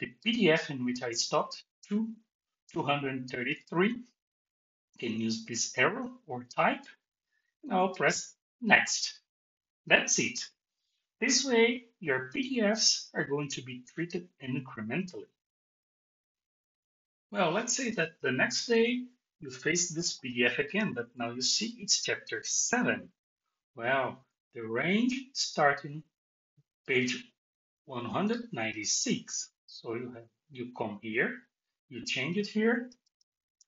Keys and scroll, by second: 32.9 BackSpace.